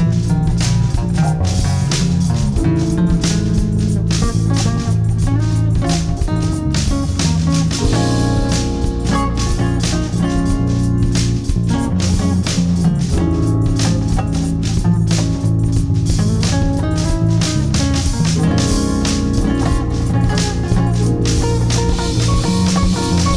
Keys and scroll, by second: 1.6 space, 2.4 e, 3.0 Escape, 6.6 Escape, 13.8 space, 14.3 alt+c, 14.4 alt+w, 14.8 p, 16.2 Escape, 17.7 ctrl+z, 18.9 space, 21.8 space.